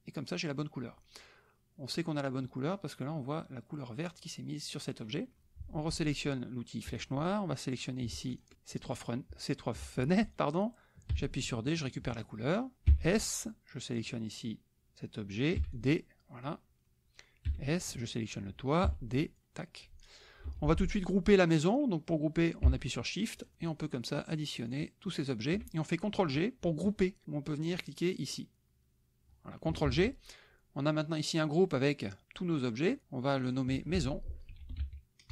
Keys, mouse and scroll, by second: 6.9 click, 7.8 click, 8.4 shift+click, 11.1 d, 11.7 click, 13.0 s, 14.0 click, 15.6 d, 15.7 click, 17.6 s, 17.9 click, 18.8 d, 19.1 click, 20.5 F1, 23.5 shift+click, 23.7 shift+click, 24.3 shift+click, 24.7 shift+click, 25.1 shift+click, 29.9 ctrl+g, 33.3-34.5 drag, 34.5-35.3 typing.